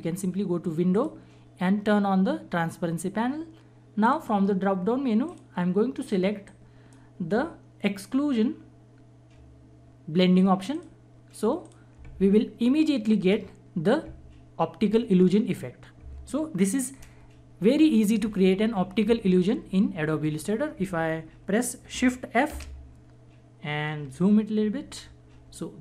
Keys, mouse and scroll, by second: 0.9 click, 4.1-9.7 drag, 6.8 click, 10.7 click, 21.8 shift+Num_Lock, 22.5 shift+f, 24.6 =.